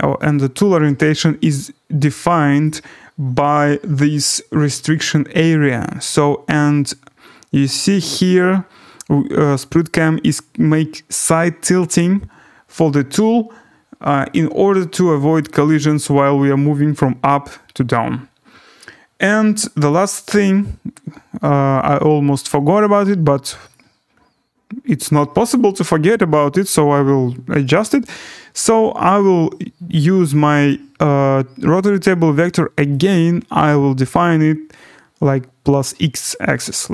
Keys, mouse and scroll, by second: 2.6 right click, 7.6 click, 14.4-15.2 scroll, 15.4 right click, 15.7 scroll, 19.9 click, 20.6 scroll, 22.3 click, 23.7 click, 24.1-24.6 scroll, 33.0 click, 34.2 click.